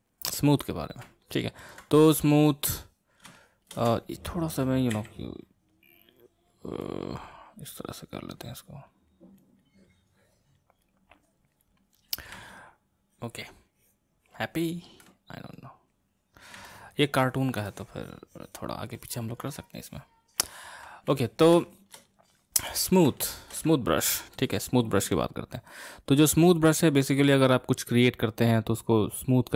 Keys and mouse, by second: 1.2-4.9 ctrl+middle drag, 4.9 g, 5.7-12.4 drag, 12.4-15.4 middle drag, 15.6-16.6 drag, 16.6-24.3 middle drag, 24.3-27.4 drag.